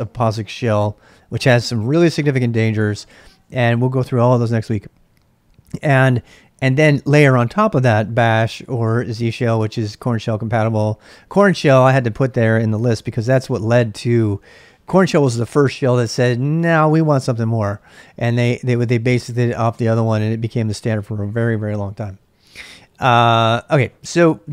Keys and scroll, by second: 12.9 ctrl+a, 13.1 ctrl+a.